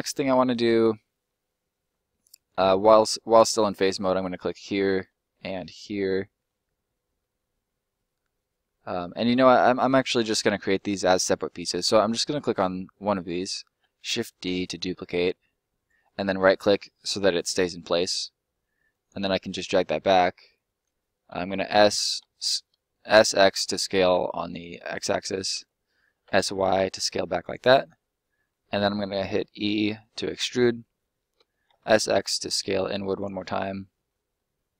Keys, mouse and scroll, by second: 1.3-1.7 scroll up 1, 3.9 right click, 4.3 shift+right click, 5.2 shift+right click, 5.3 middle click, 9.0 shift+middle click, 12.3 right click, 13.5 shift+right click, 13.7 shift+d, 15.7 right click, 16.2 middle click, 17.3 click, 19.3 middle click, 21.3 s, 22.1 x, 24.6 click, 24.8 middle click, 25.5 s, 26.2 y, 27.4 click, 27.6 middle click, 28.7 e, 30.4 click, 30.7 middle click, 31.3 s, 31.6 x, 33.1 click, 33.3 scroll up 1, 33.4 middle click.